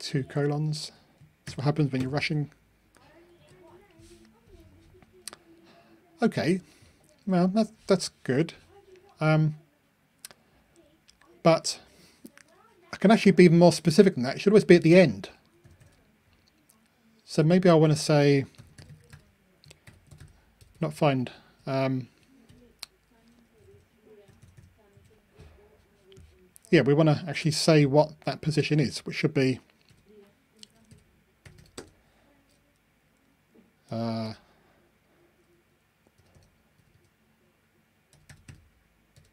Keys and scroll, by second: 3.3 ctrl+r.